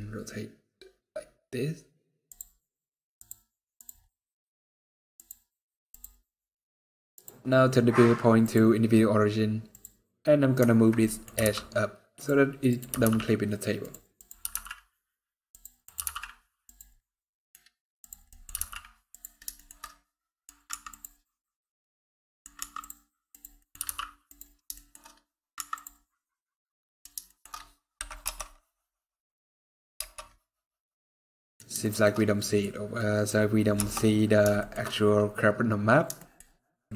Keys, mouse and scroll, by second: 2.9 click, 3.8 middle click, 4.9 click, 5.6 click, 10.3 click, 10.8 middle click, 11.1 g, 12.4 click, 12.6 g, 13.9 click, 14.2 g, 15.6 click, 15.8 g, 16.8 middle click, 17.7 click, 18.0 scroll down 1, 18.0 middle click, 18.2 g, 19.3 shift+middle click, 19.6 middle click, 20.4 scroll down 1, 20.4 Tab, 21.2 middle click, 22.2 scroll up 2, 22.3 Tab, 23.0 click, 23.3 middle click, 23.5 g, 24.3 scroll down 2, 24.5 shift+middle click, 24.9 scroll up 2, 25.3 Tab, 25.8 scroll down 2, 25.9 middle click, 27.0 shift+middle click, 27.3 scroll up 1, 28.0 KP_0, 29.7 KP_0, 31.1 middle click, 31.5 shift+middle click, 32.1 middle click, 32.7 middle click, 32.9 shift+middle click, 33.1-33.5 scroll down 1, 33.5 KP_0, 34.3 shift+middle click, 34.3-34.9 shift+scroll up 7, 35.5 scroll down 1, 35.6-35.9 scroll down 3, 35.9 shift+middle click, 36.8 shift+middle click.